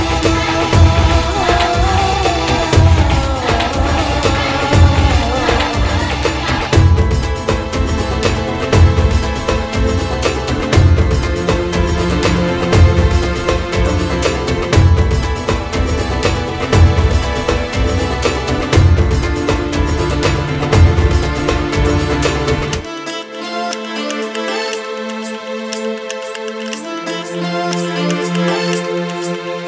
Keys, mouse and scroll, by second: 1.9 middle click, 2.7 KP_1, 3.2 KP_3, 3.5 Tab, 4.3-5.9 right drag, 7.1 r, 7.9 g, 8.7-10.0 right drag, 10.0 KP_7, 11.2 click, 11.4-12.6 right drag, 12.6 shift+d, 14.2-15.8 middle drag, 16.0 s, 17.0 s, 18.5 KP_7, 19.4 shift+d, 20.1 r, 21.1-21.7 middle drag, 21.7 r, 22.2-22.7 middle drag, 22.7 KP_3, 23.2 KP_1, 23.8 r, 24.8-25.7 middle drag, 25.7 drag, 25.9-27.3 middle drag, 27.3 s, 28.4-29.6 middle drag.